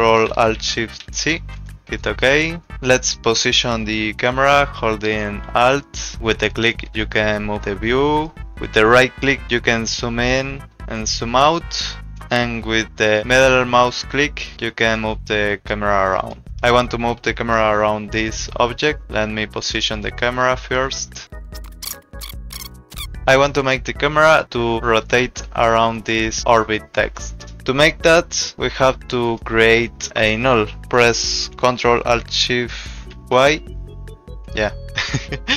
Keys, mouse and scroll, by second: 1.0 ctrl+alt+shift+c, 1.9 click, 6.2 alt+click, 8.4 alt+click, 9.8 alt+right click, 13.2 alt+click, 14.9 alt+click, 19.0 alt+right click, 20.7 alt+click, 21.3 alt+click, 21.4 alt+right click, 21.4 alt+click, 21.8 alt+click, 22.0 alt+click, 22.4 alt+right click, 22.7 [, 22.7 alt+click, 23.0 [, 25.8 click, 29.2 click, 33.1 ctrl+alt+shift+y.